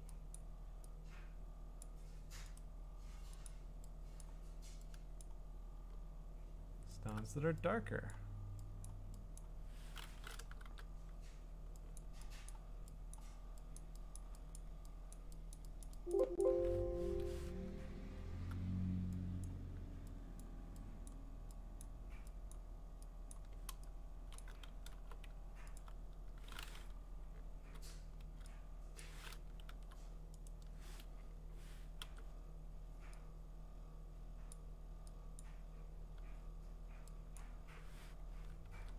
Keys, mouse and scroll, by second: 0.6 click, 1.8 click, 2.6 right click, 3.5 click, 4.3 click, 5.2 click, 7.1 alt+click, 7.3 alt+click, 8.1 click, 8.9 click, 9.4 click, 9.8 alt+click, 10.6 $, 12.0 click, 12.5 click, 13.2 click, 13.8 click, 14.2 click, 14.6 click, 15.2 click, 15.6 click, 15.8 click, 16.2 click, 16.4 click, 17.0 Escape, 17.6-19.4 scroll, 19.4 click, 20.4 click, 21.1 click, 21.8 click, 22.5 click, 23.3 click, 24.4 click, 24.9 b, 25.8 alt+click, 26.9-27.7 [, 28.2 [, 29.0 click, 29.6 ctrl+z, 30.5 right click, 31.3 Escape, 32.0 Escape, 34.5 click, 35.4 click, 37.4 click, 38.6 ctrl+z.